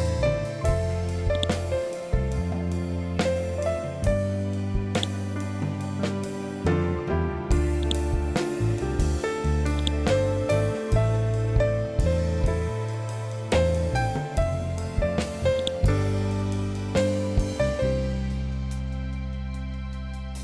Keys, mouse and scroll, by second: 0.8 right click, 4.4 click, 7.3-15.0 drag, 15.0-20.4 ctrl+drag.